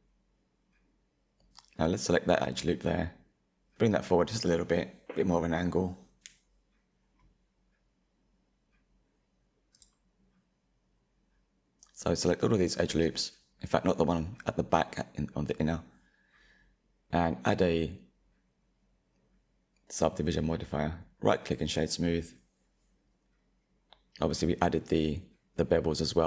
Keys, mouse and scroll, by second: 0.9 KP_1, 2.4 click, 4.2 middle click, 5.0 alt+click, 5.9 click, 9.6 click, 10.0 middle click, 10.6 alt+click, 10.9 alt+shift+click, 11.7 alt+shift+click, 11.9 middle click, 12.3 alt+shift+click, 12.4 middle click, 12.6-13.1 scroll up 1, 13.1 middle click, 14.1 click, 14.2 middle click, 14.4 alt+click, 14.7 alt+shift+click, 15.0 alt+shift+click, 15.6 ctrl+b, 17.0 Tab, 17.8-20.8 drag, 20.8-22.9 right drag, 22.9 click, 24.3-26.2 middle drag.